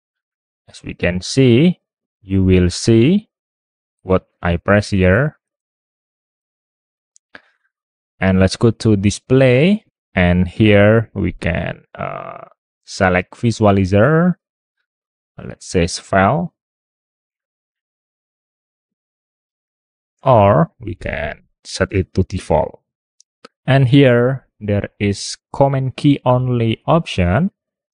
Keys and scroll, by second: 2.7 super+Tab, 3.8 super+Tab, 5.0 super+Tab, 5.5 super+Tab, 6.0 super+Tab, 18.5 super+Tab, 20.2 super+Tab.